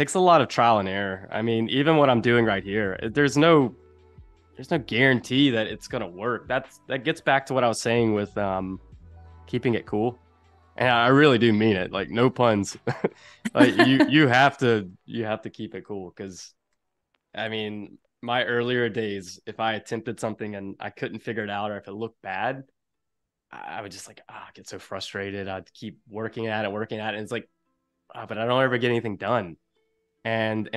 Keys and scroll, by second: 1.6 =, 2.5 a, 7.8 shift+c, 14.6 a, 16.3 space, 17.8 super+-, 19.1 super+=, 19.5 space.